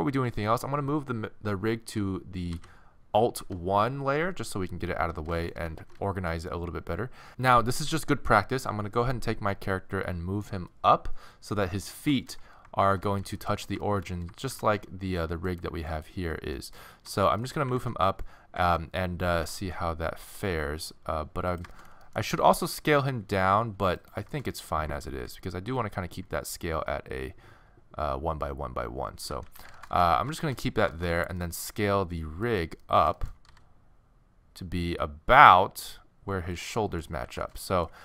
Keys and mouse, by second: 2.5 m, 5.8 alt+shift+1, 12.8 shift+1, 13.2 z, 14.6 alt+shift+1, 15.5 middle click, 16.3-17.5 middle drag, 17.8 ctrl+z, 18.6 ctrl+z, 19.4 g, 22.4 s, 25.2 n, 29.2 n, 29.5 z, 32.5-34.2 middle drag, 33.5 s, 34.2-36.2 drag, 36.8 middle click, 37.2 z.